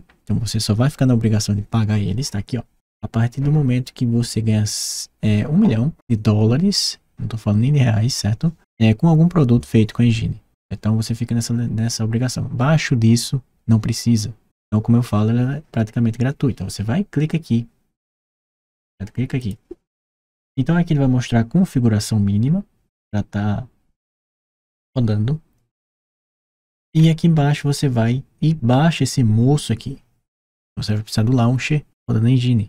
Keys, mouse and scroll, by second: 18.2 middle click, 25.4 middle click, 26.2 middle click.